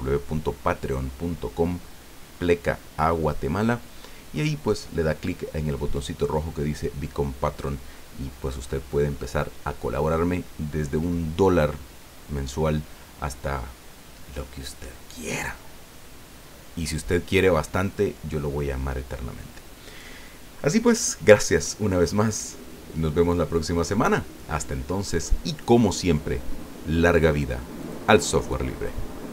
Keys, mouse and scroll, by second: 23.4-25.4 drag, 27.8 click.